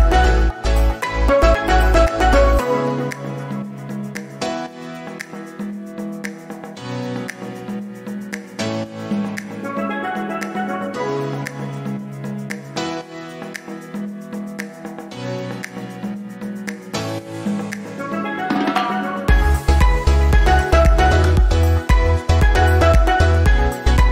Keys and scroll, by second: 23.6 Delete.